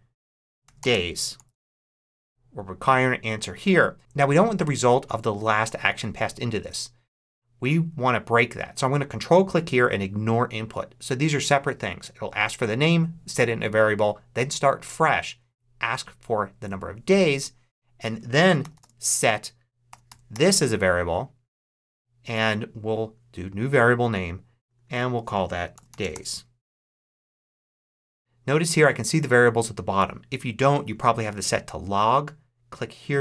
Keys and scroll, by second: 0.1-1.7 typing, 18.3 s, 18.7 space, 20.0 a, 20.2 r, 25.4-26.5 typing.